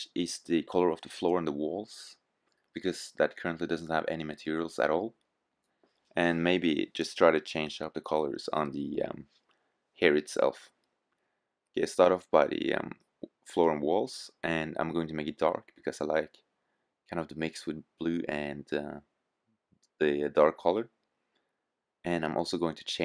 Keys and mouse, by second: 10.5 middle click, 11.8-13.3 middle drag, 13.3 click.